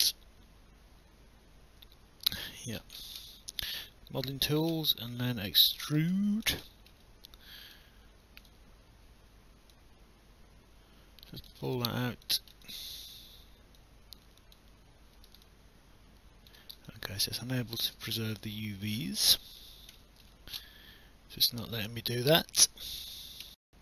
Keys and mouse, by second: 0.0 alt+middle click, 4.2 click, 5.6 click, 6.1 alt+click, 6.7 alt+middle click, 8.4 w, 9.7 click, 11.7 alt+click, 12.6 click, 13.8 click, 15.5 alt+click, 16.9 alt+click, 18.0 alt+click, 19.4 alt+click, 20.0 alt+middle click, 23.4 alt+F9.